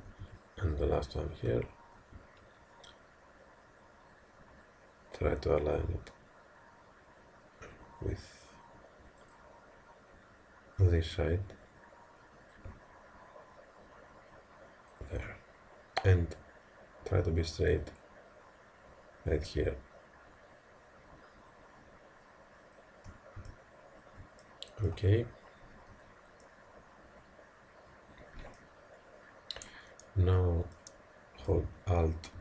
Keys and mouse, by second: 0.0 a, 0.3 b, 1.5 g, 12.6 click, 23.5 a, 24.4-27.5 middle drag, 25.9 z, 27.5 click, 28.0 middle click, 30.7-32.4 middle drag.